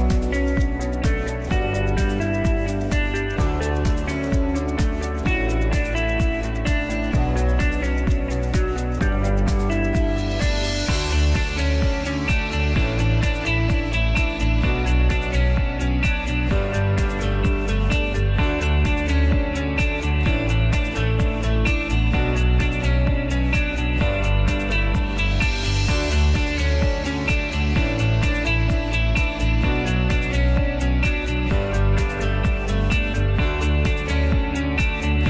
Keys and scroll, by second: 0.0-2.9 typing, 26.6-28.4 typing, 31.7 Return.